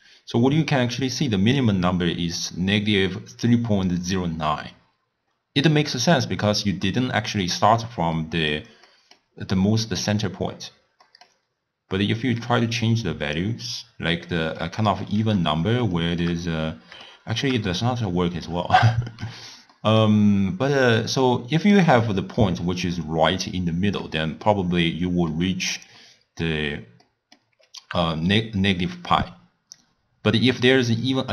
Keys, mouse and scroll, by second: 1.3-4.3 drag, 6.5-13.3 middle drag, 13.3 click, 14.4-15.0 middle drag, 15.0 scroll down 1, 15.1-15.5 scroll up 3, 16.0 shift+middle click, 16.4-17.1 scroll up 1, 17.1-21.1 shift+middle drag, 21.1 click, 24.1-30.1 middle drag.